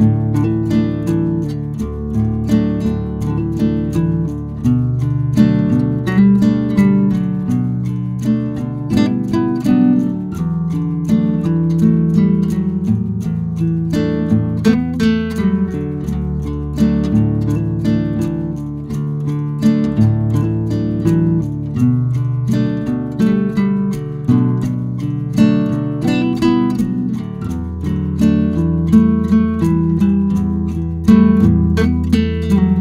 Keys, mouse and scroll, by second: 2.9-6.9 drag, 9.3 right click, 11.0-18.1 drag, 18.9 Delete, 21.3 scroll down 1, 23.7 scroll up 1, 26.5-26.9 scroll up 1, 26.9 ctrl+q, 30.5 ctrl+q, 31.4 click.